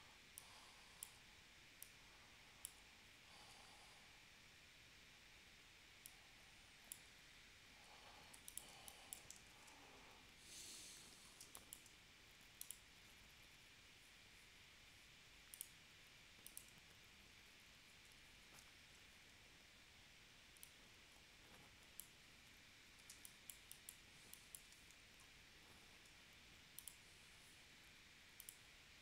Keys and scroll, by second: 3.3 super+z, 8.3 v, 8.7 space, 9.5 super+s, 11.4 space, 17.9 super+z, 18.8 shift+w, 23.1 space, 26.1 v.